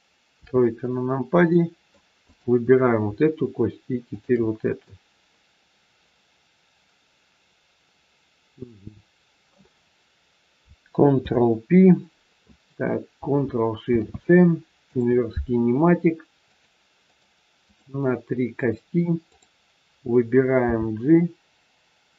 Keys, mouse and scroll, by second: 0.2 KP_3, 1.0-1.3 scroll up 1, 1.5 middle click, 2.2 click, 4.0 shift+click, 4.6 middle click, 11.1 ctrl+p, 13.9 ctrl+shift+c, 16.5 click, 17.0 click, 20.4 g.